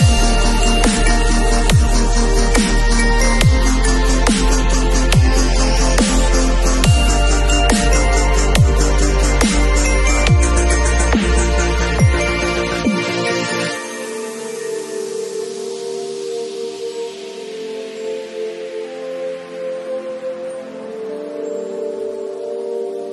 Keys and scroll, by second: 14.3 Delete, 22.5 b.